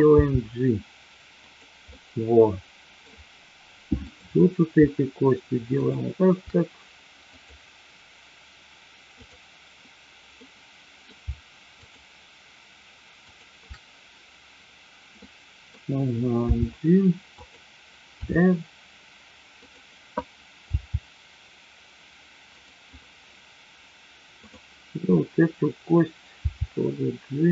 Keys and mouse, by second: 0.2 g, 1.4 click, 1.8-2.9 middle drag, 4.1-5.1 drag, 5.8 shift+click, 7.3 click, 9.2-10.2 drag, 10.4-10.9 middle drag, 11.8-12.7 shift+drag, 13.2-14.2 shift+drag, 15.2-15.7 middle drag, 16.4 g, 18.2 r, 20.7 g, 24.3-25.4 drag, 26.3 g.